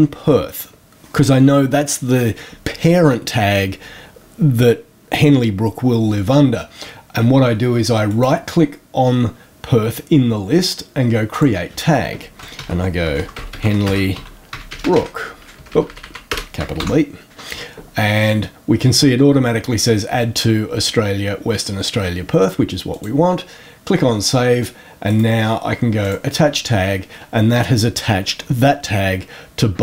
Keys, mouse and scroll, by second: 8.0 click, 11.2 click, 12.2-16.7 typing, 22.8 click, 25.0 right click, 25.9 click.